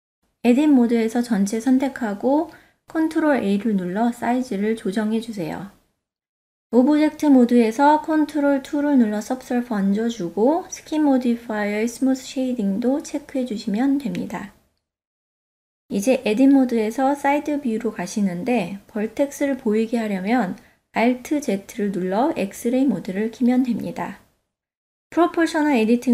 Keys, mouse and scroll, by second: 0.3 Tab, 1.2 a, 3.3 ctrl+a, 5.6 Tab, 8.9 ctrl+2, 10.7 click, 11.9-12.7 ctrl+middle drag, 13.4 KP_3, 19.2 Tab, 21.0 alt+z, 24.4 click.